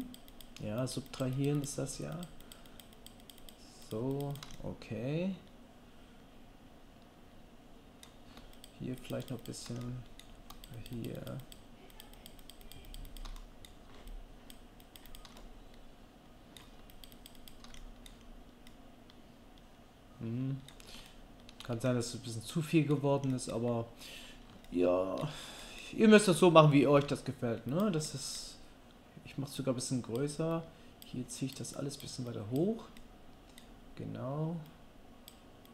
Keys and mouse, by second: 4.5 click, 4.5 middle click, 4.5 right click, 5.6 click, 5.6-21.6 middle drag, 5.6 right click, 22.0-24.4 middle drag, 25.1-27.8 shift+middle drag, 27.0 f, 27.8-29.6 drag, 29.6-35.7 middle drag.